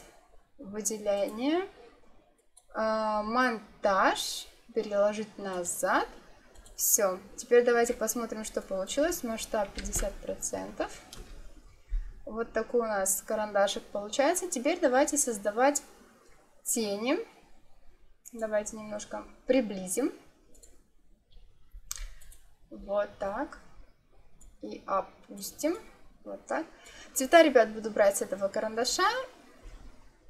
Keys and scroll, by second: 9.7 5, 9.8 0, 11.1 Return.